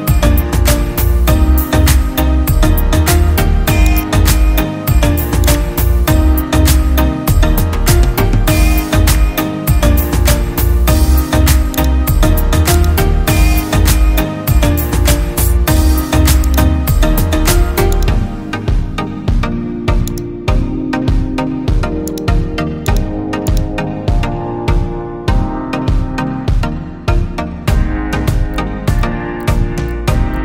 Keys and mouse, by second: 3.3-4.4 right drag, 5.6-9.8 drag, 12.8-17.3 drag, 18.0-19.3 drag, 20.2-21.8 drag, 22.2 click, 23.6-24.7 drag, 25.1 space, 28.7 click, 30.0-30.4 drag.